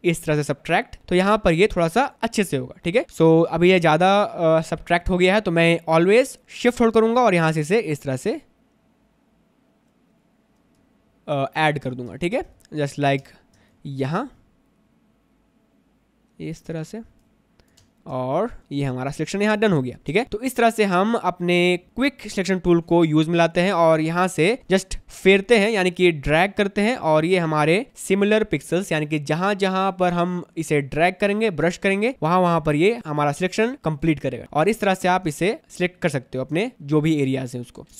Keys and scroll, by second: 0.4 space, 12.2 space, 18.0 space, 20.2 space, 23.8 space, 27.9 ctrl+z, 32.2 space, 35.4 space, 37.8 ctrl+z.